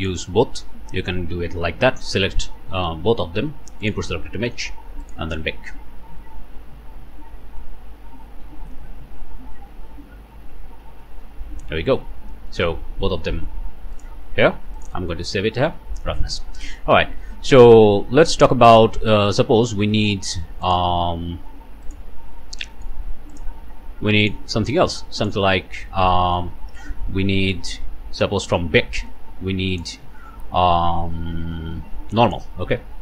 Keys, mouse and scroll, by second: 0.0 shift+middle click, 3.8 click, 5.0 click, 12.0-12.5 scroll up 1, 12.5 click, 12.9-13.4 scroll down 1, 14.0 click, 14.8 click, 15.7 Return, 17.2 scroll up 1, 19.4-19.8 scroll down 1, 19.9 ctrl+middle click, 20.6 ctrl+shift+click, 21.9 click, 22.6 click, 23.3 ctrl+shift+click, 23.5 ctrl+shift+middle click, 24.2 middle click, 25.2 shift+middle click, 26.1 middle click, 27.0-27.4 scroll down 1, 27.5 scroll up 2, 28.6 scroll up 2, 29.7 click, 32.3 click, 32.9 scroll down 1.